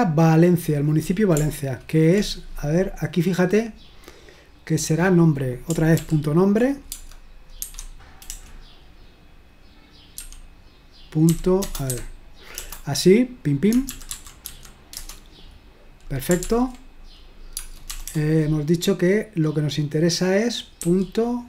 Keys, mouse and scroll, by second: 0.6 scroll down 1, 3.1-3.6 scroll up 1, 6.0 ctrl+p, 6.9 space, 7.6 0, 10.2 typing, 13.9-15.0 typing, 15.0 Return, 16.5 ctrl+p, 17.6 space, 18.1 BackSpace.